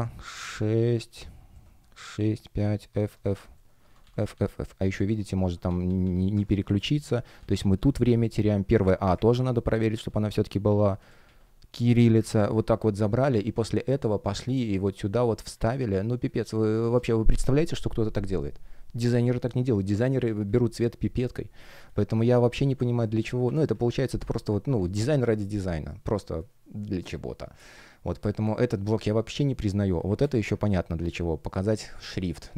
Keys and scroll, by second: 0.5 BackSpace, 2.7 shift+a, 3.2 shift+BackSpace, 3.7 shift+b, 4.8 Caps_Lock, 4.9-7.3 typing, 6.2 Caps_Lock, 8.5 Left, 9.6 shift+Left, 9.7 shift+f, 10.9 BackSpace, 11.1 shift+a, 12.3 super+c, 16.4 super+v, 16.7 Return, 22.4 BackSpace, 26.0 space, 29.5 space, 30.4 F1.